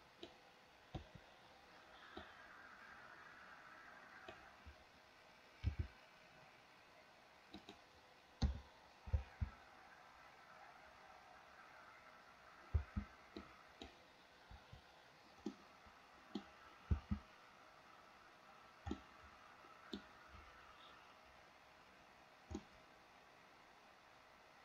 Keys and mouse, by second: 1.0 Delete, 2.3-4.4 drag, 5.7 g, 8.5 i, 9.2 space, 12.8 space, 13.4-13.9 drag, 14.6 Delete, 15.5-16.4 middle drag, 17.0 space, 19.0-20.0 middle drag, 22.7-24.6 middle drag.